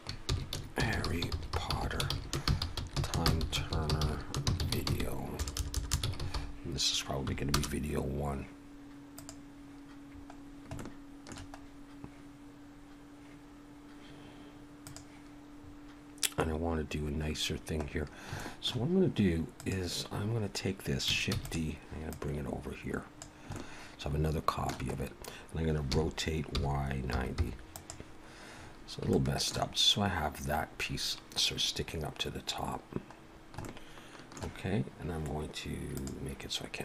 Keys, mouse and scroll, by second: 0.9 r, 1.7 t, 2.7 i, 5.5 BackSpace, 7.5 BackSpace, 7.6 Page_Up, 9.1 click, 10.4 scroll down 2, 10.8 shift+middle click, 11.6-12.0 scroll up 1, 14.8 click, 15.6 scroll up 3, 17.3-18.2 scroll down 6, 18.4 shift+middle click, 19.6 click, 21.3 shift+d, 22.1 click, 23.5 shift+middle click, 24.9 scroll up 1, 25.9 r, 28.6 scroll up 3, 29.1 shift+middle click, 30.2-30.5 scroll down 1, 31.5 scroll down 2, 33.2 scroll down 1, 33.7 shift+middle click, 35.9 click.